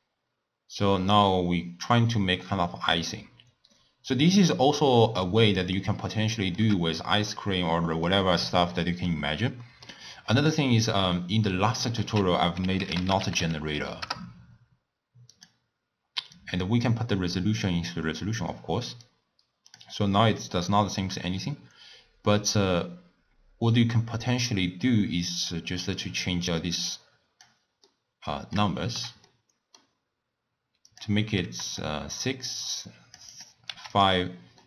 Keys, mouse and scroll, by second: 6.3-6.9 shift+middle drag, 6.9 scroll down 1, 7.0 scroll up 1, 7.3-10.4 middle drag, 10.4 click, 11.6 middle click, 12.0 ctrl+a, 16.4 drag, 17.9 click, 19.0-22.1 drag, 26.0-27.9 drag, 27.9-30.9 middle drag, 30.9 click, 32.6-34.0 drag.